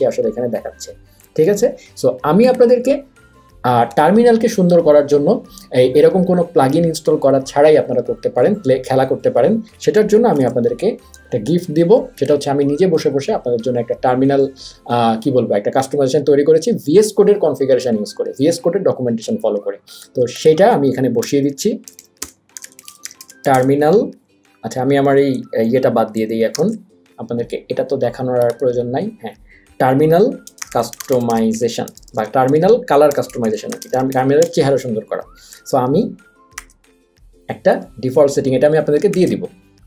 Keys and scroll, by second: 4.2 ctrl+`, 11.2 super+,, 21.6 Return, 22.1-24.2 typing, 26.8 shift+super+p.